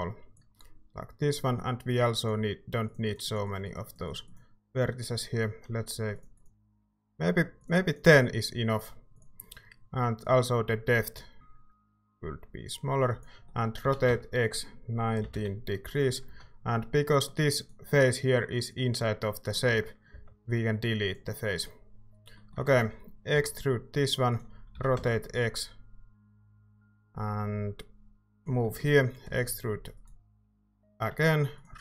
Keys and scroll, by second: 13.8-16.2 typing, 19.6-20.6 typing, 23.3 e, 24.7-25.4 typing, 29.2 r, 30.9 e.